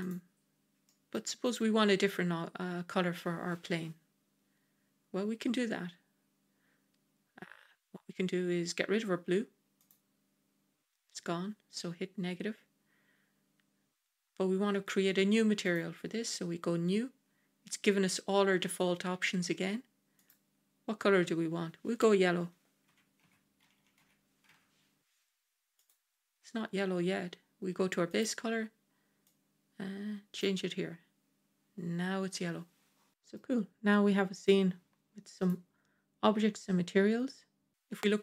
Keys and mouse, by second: 0.7-1.0 middle drag, 9.7 click, 15.5 click, 20.2-25.8 drag, 25.8 l, 28.0 click, 33.1 middle click, 36.3 g.